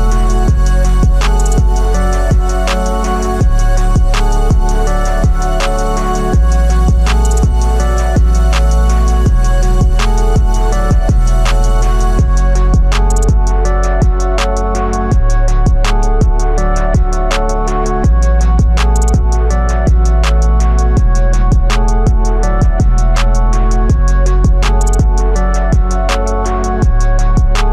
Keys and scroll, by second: 2.6 x, 4.0 x, 5.8 x, 25.2 ctrl+d.